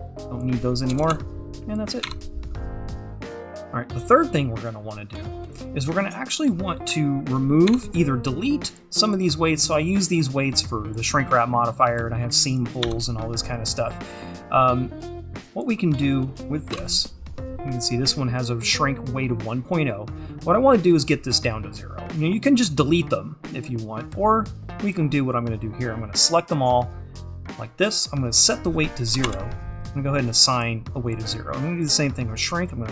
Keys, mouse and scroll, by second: 1.0 KP_0, 2.1 Tab, 3.5 click, 8.7-12.6 drag, 22.5-24.2 drag, 24.9-31.1 drag, 31.8-32.9 drag.